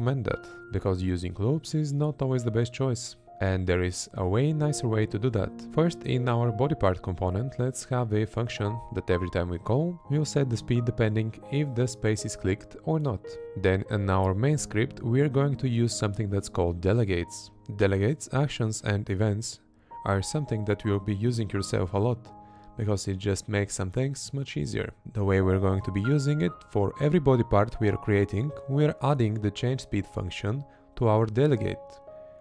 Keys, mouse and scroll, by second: 0.1 space, 0.9 space, 1.4 space, 1.9 space, 2.3 Right, 3.0 space, 3.3 Left, 12.0 Right, 13.9 space, 16.1 space, 18.0 space, 20.6 space, 27.6 Left, 28.9 Left, 30.4 Right, 31.6 Left.